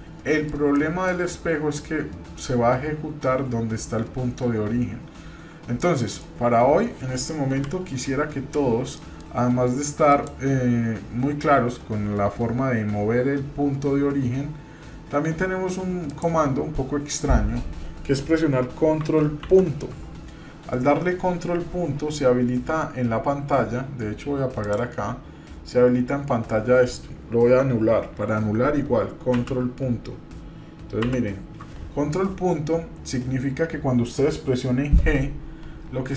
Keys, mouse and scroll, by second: 0.7-1.1 shift+middle drag, 5.7-6.3 middle drag, 7.4 KP_7, 8.7 shift+middle click, 10.1-15.5 drag, 19.4 ctrl+., 22.1-24.3 scroll up 1, 24.6 click.